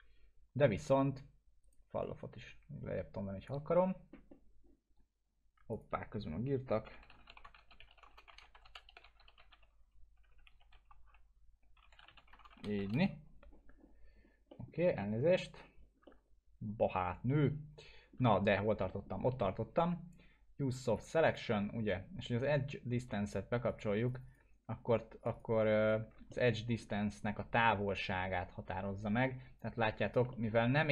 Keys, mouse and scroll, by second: 1.6 right click, 2.0-3.5 drag, 6.6-13.3 typing, 14.5 middle click, 15.0-15.6 alt+middle click, 15.6 scroll up 1, 16.0-18.2 alt+middle drag, 18.8 alt+middle click, 20.9 click, 26.3-26.9 alt+middle drag, 27.6-30.6 drag, 30.3 alt+middle click.